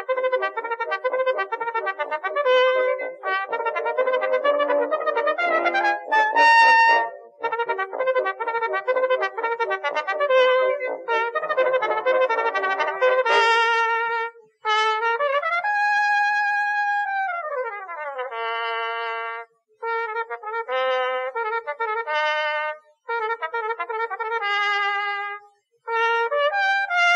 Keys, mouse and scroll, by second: 0.0 Tab, 0.8 Tab, 2.0 a, 2.2 c, 3.2 x, 3.6 z, 5.4 click, 6.6 click, 8.2 ctrl+z, 8.2 ctrl+z, 13.2 middle click, 14.6 ctrl+r, 15.7 click, 16.2 ctrl+r, 17.5 click, 17.9 middle click, 18.7 middle click, 19.2 middle click, 19.4 middle click, 20.2 middle click, 20.3 middle click, 21.1 a, 21.3 a, 21.8 c, 22.5 click, 22.8 middle click, 23.3 s, 24.5-25.7 drag, 27.0 KP_3.